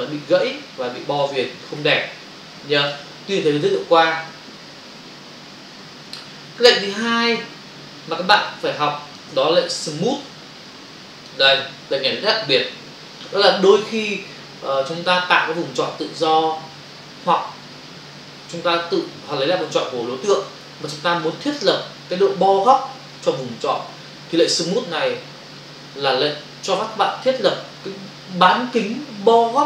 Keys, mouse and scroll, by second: 5.6 Delete, 6.9 click, 8.5 click, 8.6 space, 10.3 b, 10.6 click.